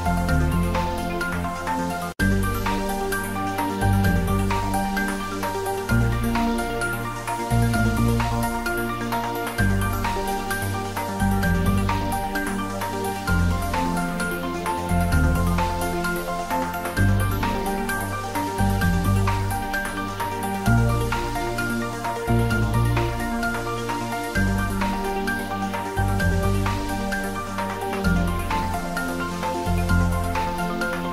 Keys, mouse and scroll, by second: 1.1 click, 2.3 Tab, 4.3 click, 5.3 g, 5.7 z, 6.3 click, 7.1 ctrl+middle click, 8.1 click, 10.4 shift+click, 12.2 ctrl+l, 15.0 click, 15.4-18.2 ctrl+middle drag, 18.2 ctrl+l, 19.3 click, 20.3 middle click, 21.1-22.8 ctrl+middle drag, 22.8 ctrl+middle click, 23.0 ctrl+z, 23.7-25.9 middle drag, 25.9 shift+middle click, 26.7 click, 28.4 ctrl+l, 29.4 click, 29.9-31.1 middle drag.